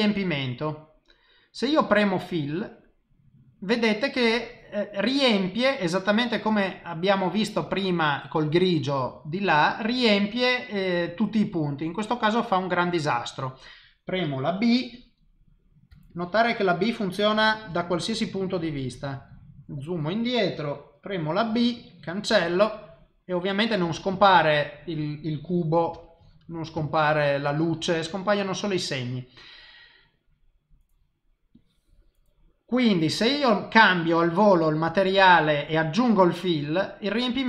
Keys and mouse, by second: 2.5 click, 5.1 click, 6.8 click, 9.8 click, 10.6 click, 13.2 click, 15.9 b, 17.7 b, 18.9 ctrl+middle click, 21.5 b, 24.1 ctrl+middle click, 25.9 b, 26.8 ctrl+middle click, 31.6 click, 34.3 click, 35.1 click, 35.7 click, 36.1 click, 36.6 click, 37.1 click.